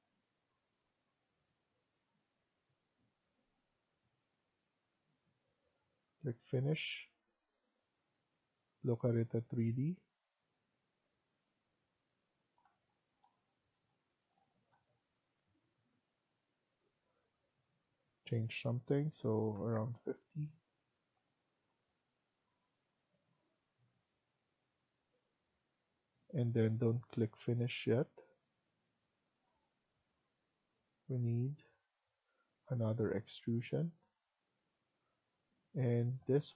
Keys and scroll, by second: 19.2-20.1 typing.